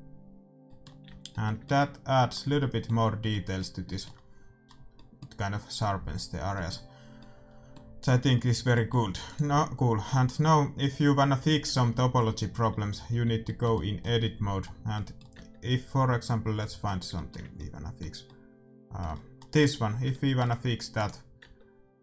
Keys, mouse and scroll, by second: 0.6-7.5 middle drag, 1.0 a, 8.3-10.7 middle drag, 9.5-10.9 right drag, 12.2 Tab, 13.1 a, 13.4 middle click, 15.7 Tab, 16.2-20.4 middle drag, 21.5 right click, 21.6 Tab.